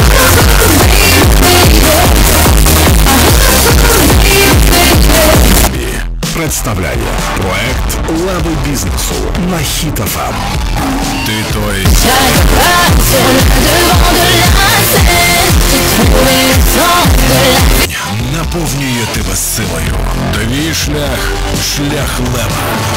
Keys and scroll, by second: 5.7 Page_Down, 18.1 Page_Down.